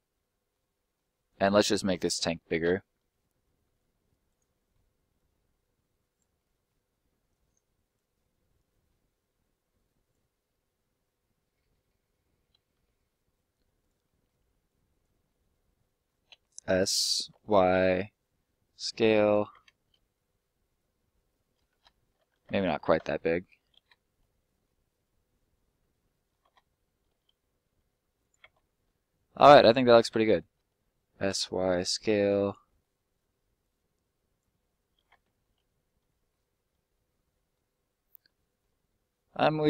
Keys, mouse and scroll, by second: 1.1 right click, 1.6 ctrl+right click, 2.1 ctrl+l, 2.6 s, 4.2 click, 4.5 middle click, 5.1 click, 6.3 middle click, 7.2 click, 8.1 middle click, 9.7 click, 10.9-12.7 scroll up 1, 12.7 s, 13.7 click, 14.0 middle click, 14.6 click, 15.3 middle click, 15.5-15.9 scroll up 1, 16.3 s, 17.3 y, 19.2 click, 19.7 scroll down 1, 19.8 middle click, 22.3 ctrl+z, 22.7 ctrl+z, 23.3 middle click, 24.0 middle click, 24.7 scroll down 1, 24.9 middle click, 27.1 s, 28.2 click, 28.6 middle click, 30.5 s, 31.3 y, 32.4 click, 32.6 middle click, 33.6 click, 34.5 middle click, 35.2 scroll down 1, 35.4 middle click, 36.3 scroll up 1, 37.0 middle click, 38.2 shift+middle click, 38.7 scroll up 1, 38.8 middle click.